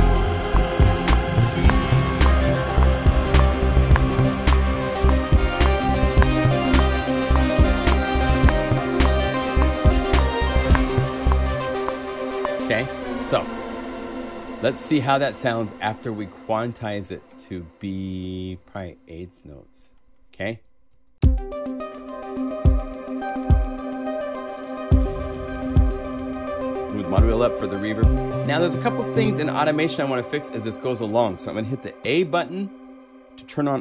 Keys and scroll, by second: 12.8 0, 20.9 0, 21.1 Return, 29.2 0, 32.0 a.